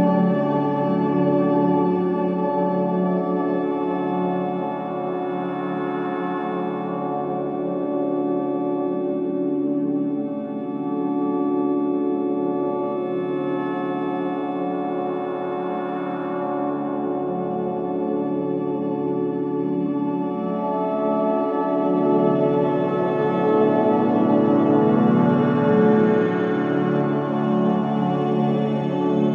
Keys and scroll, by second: 1.8 ctrl+g, 17.9 ctrl+z, 22.5 ctrl+z.